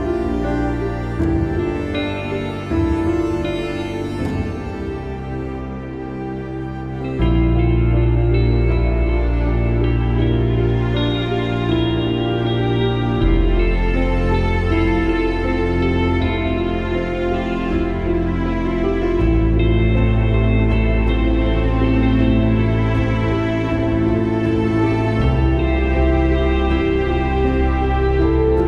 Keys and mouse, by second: 1.1 click, 4.3 click, 5.2 click, 5.7 click, 6.5 click, 7.2 click, 8.5 click, 10.7 click, 11.2 click, 13.1 ctrl+-, 14.7 ctrl+=, 15.1 space, 15.3 click, 15.5 space, 16.4 right click, 17.2 click, 20.7-22.6 typing, 20.9 click, 21.3 click, 21.8 click, 22.5 click, 24.0 ctrl+=, 28.1 click.